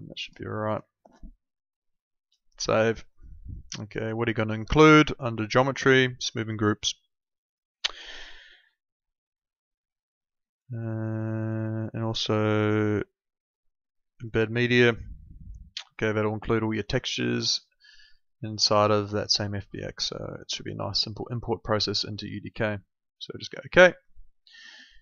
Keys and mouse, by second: 2.2 click, 5.2 click, 10.4 click, 14.1 click, 23.4 click.